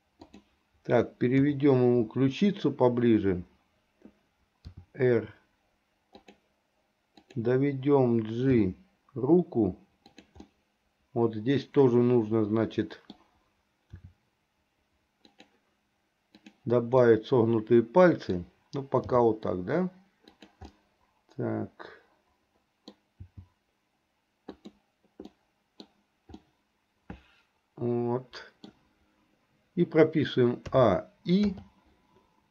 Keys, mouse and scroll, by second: 0.3 click, 1.4 KP_7, 4.7 r, 7.2 click, 8.6 g, 10.5-13.3 middle drag, 14.1 r, 17.1-18.5 middle drag, 19.2 g, 21.0-23.1 middle drag, 23.3 g, 25.4 middle click, 26.5-28.8 middle drag, 30.8 a, 31.6 i.